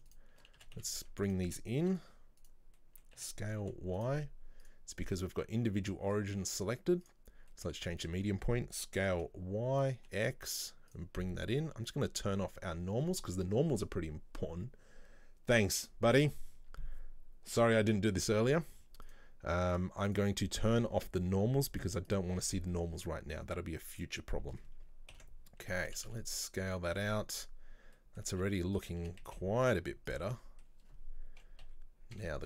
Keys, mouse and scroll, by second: 0.1 shift+right click, 0.6 s, 2.8 middle click, 3.2 s, 4.7-7.6 drag, 7.6 middle click, 8.2 s, 19.1 click, 19.8 click, 20.1-23.1 drag, 23.1-23.9 scroll down 1, 25.2 ctrl+l, 25.9 s, 27.0 shift+middle click, 27.7-28.0 scroll up 2, 28.0 middle click, 28.4 s, 30.4-31.7 middle drag, 31.7 KP_3.